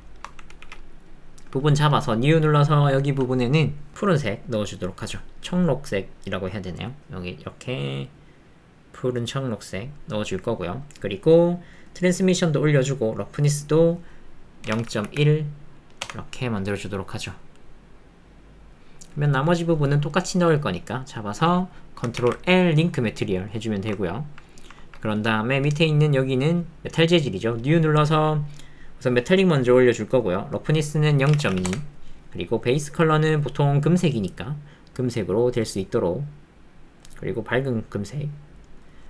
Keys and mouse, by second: 0.0 shift+click, 0.6 alt+z, 2.1 click, 2.8 click, 4.2 click, 10.7 click, 12.0 click, 12.8 click, 13.7-16.1 drag, 23.6 shift+click, 24.0 ctrl+click, 24.5 shift+middle click, 24.8 ctrl+middle click, 29.1 click, 30.0 click, 30.6-31.7 drag, 32.5 click.